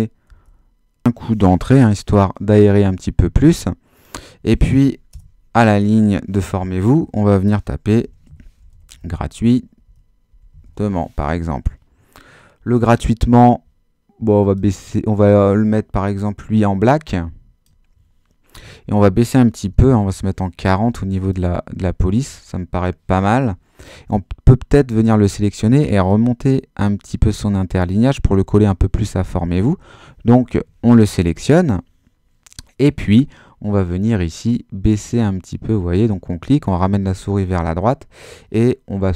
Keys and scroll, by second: 0.2 Return, 5.1 Return, 7.6-11.3 typing, 19.6 4.